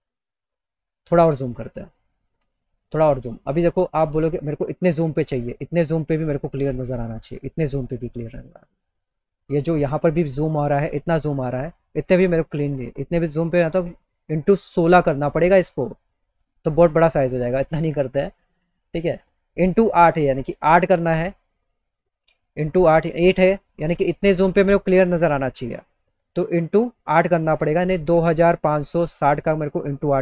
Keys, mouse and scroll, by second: 0.7 middle click, 0.7 scroll, 1.3 middle click, 1.3 scroll, 2.5 middle click, 3.2 middle click, 3.8 middle click, 4.7 middle click, 5.4 middle click, 6.5 middle click, 6.9 middle click, 17.5 middle click.